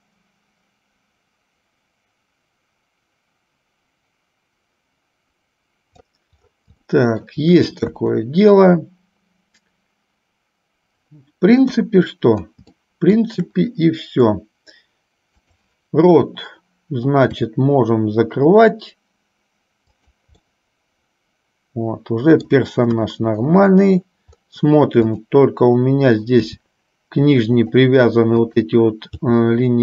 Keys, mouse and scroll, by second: 7.0 shift+middle click, 8.2 KP_1, 11.8 KP_3, 12.9 shift+middle click, 17.5 r, 20.5-22.7 middle drag, 23.0 KP_1, 25.3 click, 26.8 g, 28.7 click, 29.4 g.